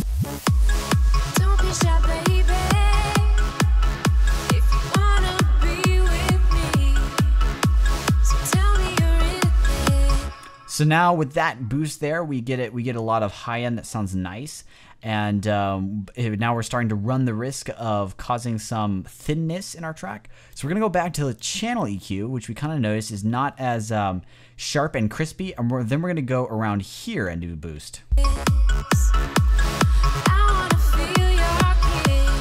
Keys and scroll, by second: 10.0 space, 27.8 space.